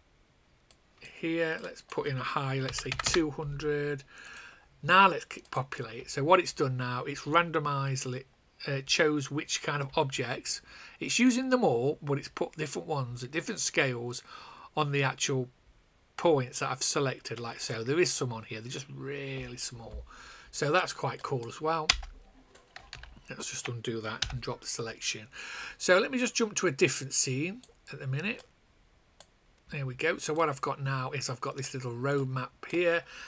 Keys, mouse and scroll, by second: 1.5 click, 2.6 KP_2, 2.8 KP_0, 4.2 click, 11.2 click, 21.8 space, 22.8 ctrl+z, 24.1 /, 26.7 click.